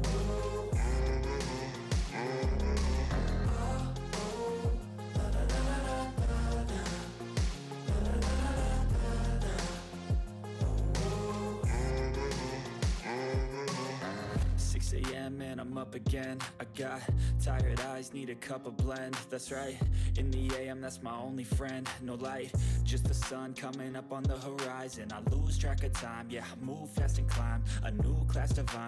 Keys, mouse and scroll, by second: 1.0-2.0 typing, 3.4 typing, 5.2-8.2 typing, 10.0-11.9 typing, 15.6 typing, 18.9 click, 18.9 5, 19.7 click, 23.4 click, 23.4 8, 23.6 ctrl+s, 24.4 click, 27.2 click, 27.3 click.